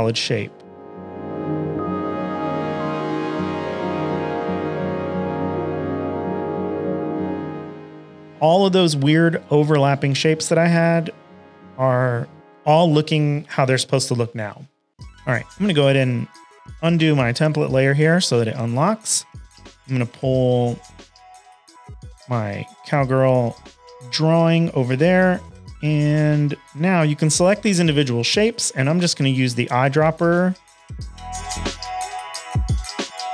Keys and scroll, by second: 14.9 v, 18.7 shift+super+a, 19.0 v, 21.3 shift+super+a, 21.5-25.3 typing, 27.6 i, 29.9 shift+super+a, 30.2-33.3 typing.